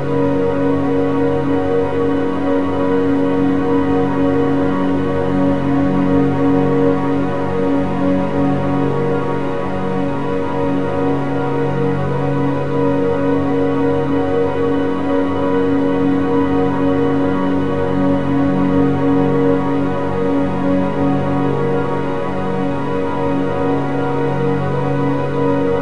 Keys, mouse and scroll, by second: 1.4 scroll up 2, 2.3 click, 3.8-6.3 middle drag, 6.3 click, 8.5 click, 12.1 click, 17.8-18.8 middle drag, 18.8-19.6 scroll down 4, 19.6 click, 20.6 ctrl+t, 20.9-22.5 middle drag, 22.5-24.3 drag, 24.3-24.7 scroll up 7, 24.9 middle click, 25.4-25.8 scroll down 1.